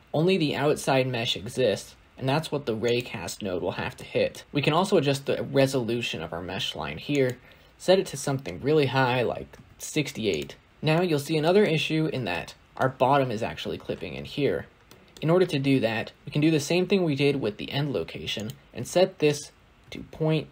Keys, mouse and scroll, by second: 1.2-2.1 scroll up 1, 2.1-2.8 scroll up 1, 2.8 scroll up 5, 4.4-6.1 scroll down 5, 6.1-9.4 scroll down 1, 9.4-10.2 scroll down 1, 10.7 scroll down 2, 10.8-11.5 middle drag, 11.5-12.2 scroll up 1, 12.2-20.5 shift+middle drag.